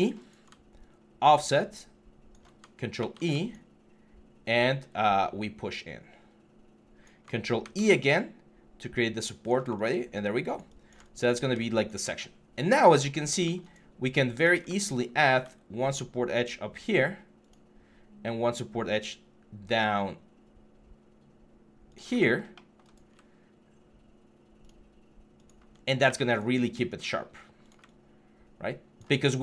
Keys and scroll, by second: 2.8 ctrl+e, 7.4 ctrl+e, 12.0 3, 13.0 1, 25.5 3, 25.8 q.